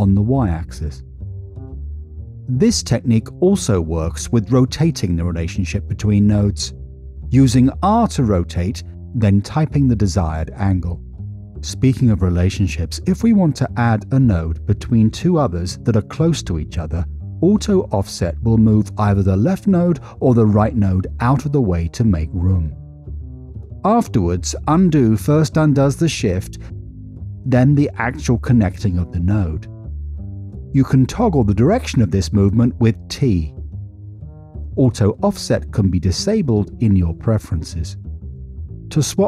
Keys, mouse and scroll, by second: 1.1 middle click, 1.9 middle click, 4.5 drag, 5.9 r, 10.7 9, 10.7 0, 11.3 Return, 13.9 middle click, 18.6 click, 19.0 g, 22.3 click, 26.1 ctrl+z, 27.2 click, 30.1 ctrl+z, 30.5 ctrl+z, 31.4 g, 33.1 t, 33.9 click, 36.9 middle click, 37.7 middle click.